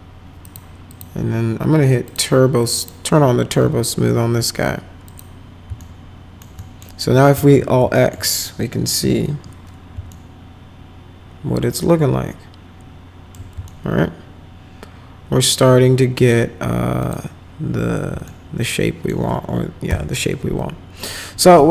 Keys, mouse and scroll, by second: 0.4 click, 0.9 click, 2.0 click, 2.7 click, 3.6 t, 5.0 click, 5.7 alt+middle click, 6.5 middle click, 7.3 alt+x, 7.9 alt+middle click, 8.2 middle click, 9.0 F4, 10.0 alt+right click, 10.8-13.3 alt+middle drag, 13.6-16.3 alt+middle drag, 17.0 click, 18.2 alt+middle click, 19.8 m.